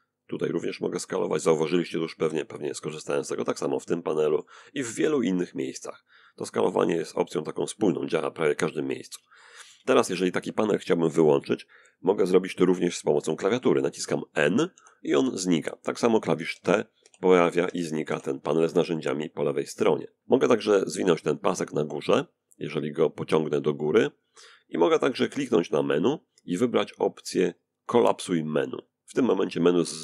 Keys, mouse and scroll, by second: 1.5-3.5 ctrl+drag, 3.5-4.8 ctrl+drag, 4.9-7.0 ctrl+drag, 8.1 shift+click, 12.7 n, 13.4 n, 13.9 n, 15.2 t, 15.7 t, 16.3 t, 17.6-23.3 ctrl+drag, 24.5 right click, 27.5 click.